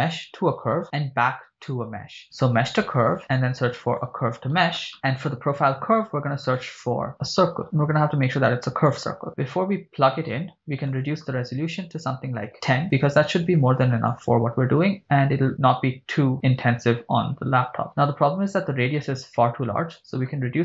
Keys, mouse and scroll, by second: 3.2 shift+a, 5.6 shift+a, 10.9-12.7 drag, 14.1-17.1 drag, 20.1-20.6 drag.